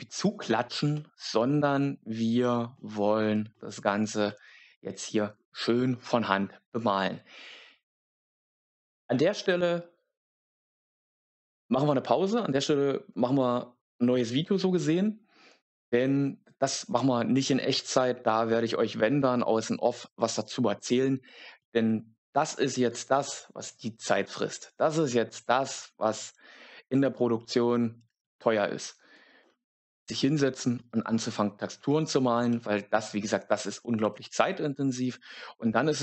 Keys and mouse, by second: 32.4 middle click.